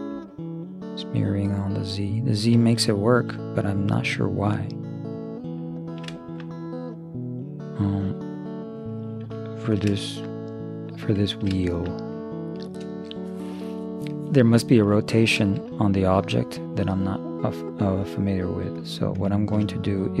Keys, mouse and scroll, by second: 0.5-2.2 middle drag, 5.8-8.3 middle drag, 9.6-11.3 middle drag, 15.1-16.6 middle drag, 18.5-20.2 drag, 19.5 middle click.